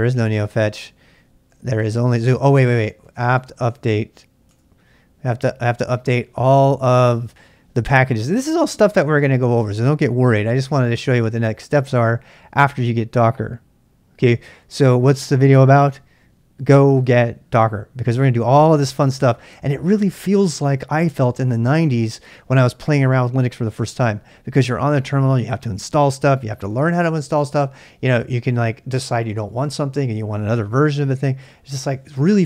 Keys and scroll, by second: 1.3-4.3 typing, 4.5 Return.